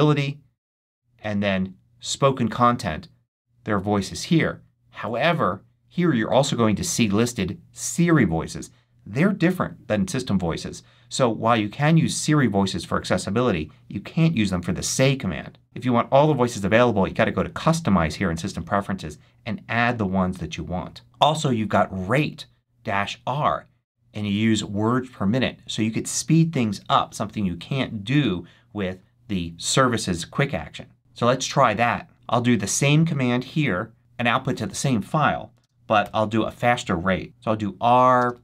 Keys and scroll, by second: 35.5 space, 35.9 -, 37.2-38.4 typing.